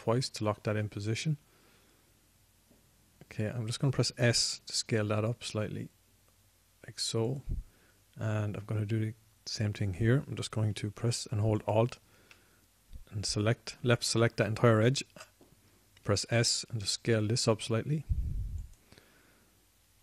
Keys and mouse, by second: 1.2-3.0 drag, 5.6 s, 8.7-14.9 drag, 17.3 s.